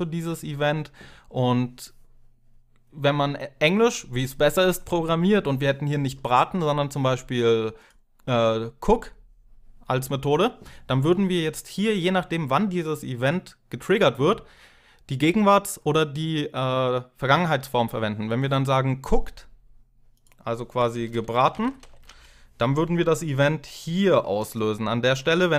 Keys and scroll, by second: 20.5-22.4 typing.